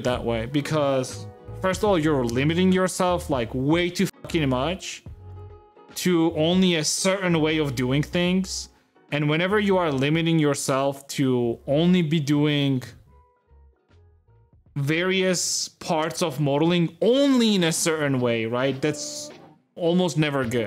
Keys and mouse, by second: 1.0 x.